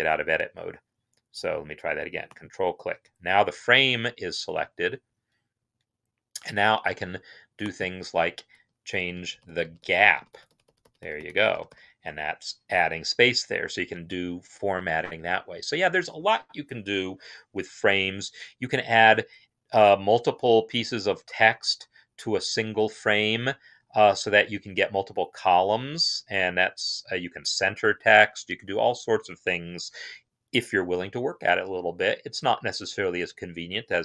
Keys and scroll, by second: 8.4-12.2 Up.